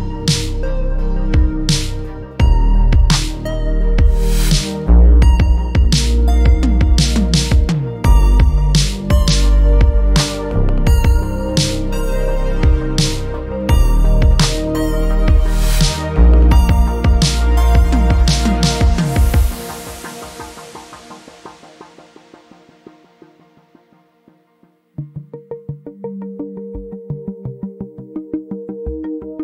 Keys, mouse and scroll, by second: 3.2 KP_1, 4.2-5.1 scroll down 12, 5.1-6.8 scroll up 10, 6.8-7.2 scroll down 6, 7.8-8.6 scroll up 10, 9.3-10.2 scroll down 1, 10.2-11.6 scroll down 9, 11.6 shift+a, 17.1 r, 20.3-21.0 scroll down 2, 21.0-23.3 shift+middle drag, 24.3-24.6 scroll up 1, 25.8 drag, 26.1 click, 27.3 Delete, 28.6 shift+a.